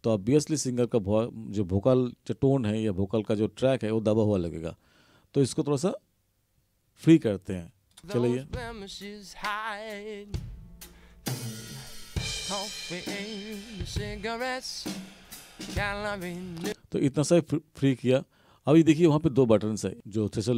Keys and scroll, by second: 8.0 space, 16.7 space.